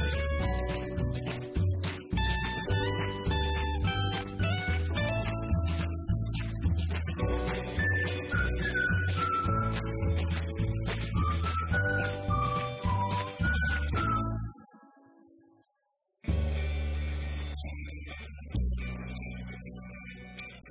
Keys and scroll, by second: 17.6-20.7 typing.